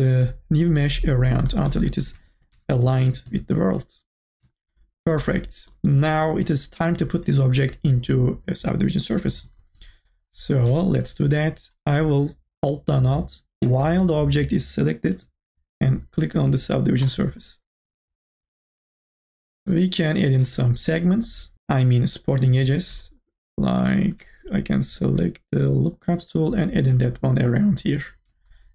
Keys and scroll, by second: 2.4 2, 2.9 e.